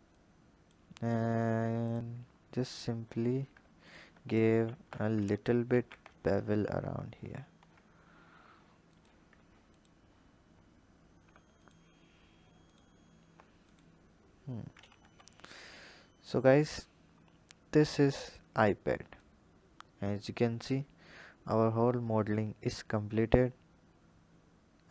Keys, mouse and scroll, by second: 2.4 alt+click, 3.6 alt+shift+click, 4.5 ctrl+z, 5.4 ctrl+b, 9.5 alt+click, 11.4 alt+shift+click, 12.4 alt+shift+click, 13.4 click, 14.1-14.8 scroll down 3, 14.8 Tab, 15.6 click, 18.1 drag, 19.0 click.